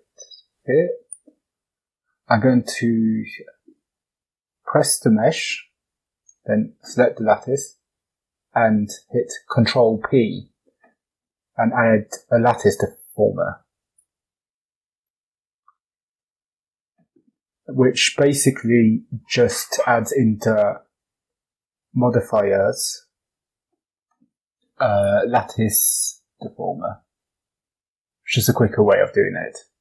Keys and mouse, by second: 4.2 click, 6.0 shift+click, 7.3 ctrl+p, 18.5-21.4 drag, 24.9-27.1 drag.